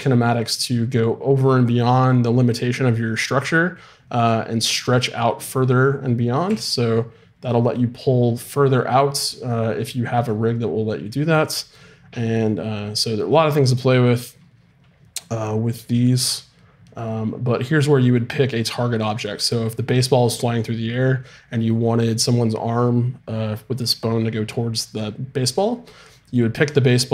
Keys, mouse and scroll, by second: 6.5 g.